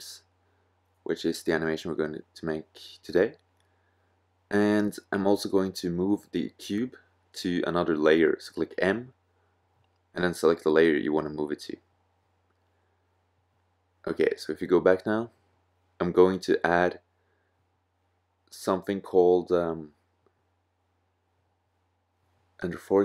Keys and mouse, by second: 9.5 m, 14.1-15.8 drag, 20.3 shift+a.